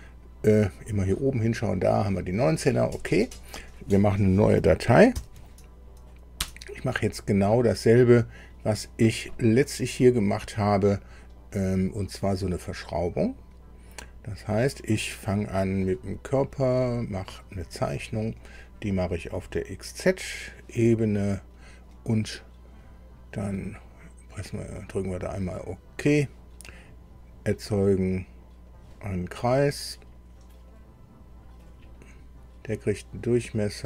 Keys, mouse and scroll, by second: 0.8 click, 5.1 ctrl+n, 6.4 Return, 15.8 click, 16.8 click, 17.7 middle click, 20.1 click, 24.4 click, 28.7 click, 30.7 click, 31.6 click, 32.0 click.